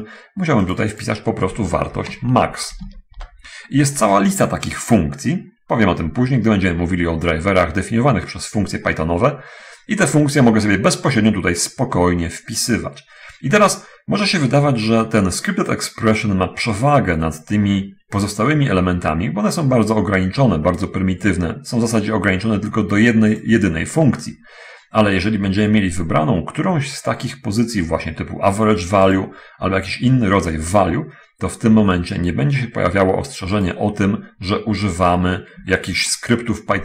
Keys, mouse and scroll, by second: 1.1 click, 2.3 BackSpace, 2.5 a, 3.1 Delete, 3.2 x, 3.5 Return, 18.6 click, 29.5 click, 33.9 click, 36.5-36.8 ctrl+middle drag.